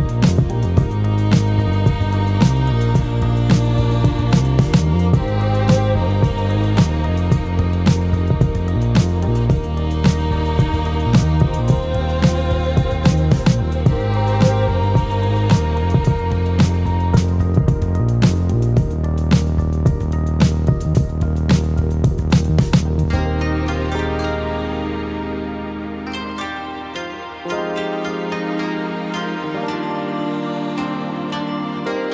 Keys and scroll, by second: 9.5 ctrl+t.